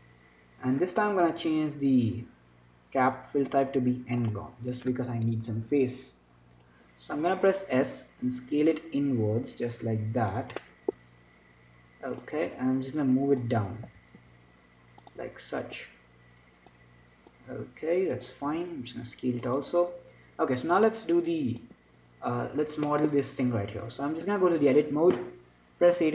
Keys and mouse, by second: 1.5 F6, 1.5 click, 8.0 s, 10.9-12.5 middle drag, 12.5-15.3 drag, 14.2 s, 16.1-19.7 drag, 18.8 s, 21.0-25.2 drag, 22.2 Tab.